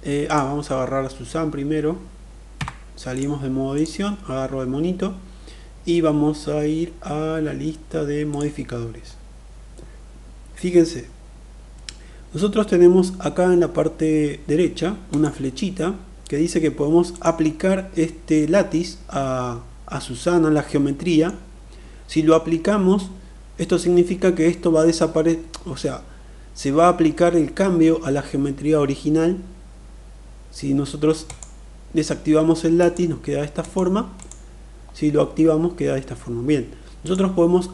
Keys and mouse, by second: 2.2 Tab, 2.8 click, 8.0 click, 14.9-16.0 drag, 16.9-18.1 drag, 20.3-21.0 middle drag, 30.9 click, 32.5 click, 33.4 click, 33.9 click, 36.6-37.7 drag.